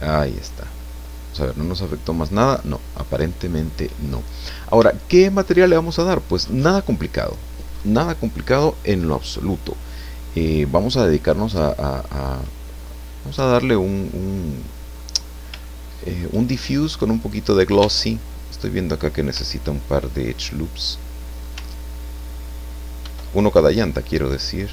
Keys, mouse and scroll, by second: 0.8-3.1 drag, 3.5 click, 4.5-5.0 scroll up 3, 5.0-6.1 shift+drag, 12.8 scroll down 2, 13.3-15.1 drag, 15.2 scroll up 2, 15.6 shift+click, 17.2 right click, 17.8 Tab, 19.8-21.3 ctrl+drag, 23.0 ctrl+r, 23.6 ctrl+click.